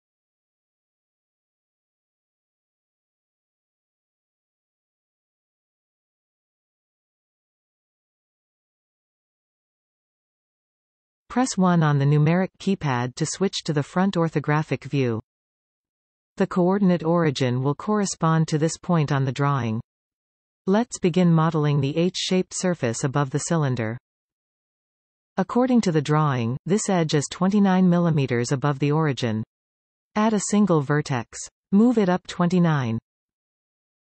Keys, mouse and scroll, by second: 2.2-3.0 scroll, 3.0-3.6 scroll, 4.5-8.2 drag, 10.9 KP_1, 26.5 shift+a, 32.2 g.